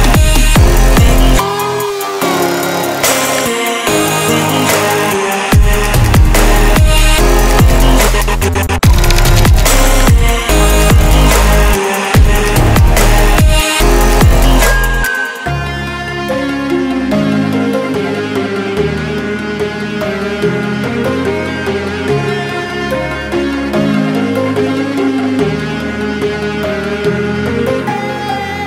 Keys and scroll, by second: 0.0 ctrl+z.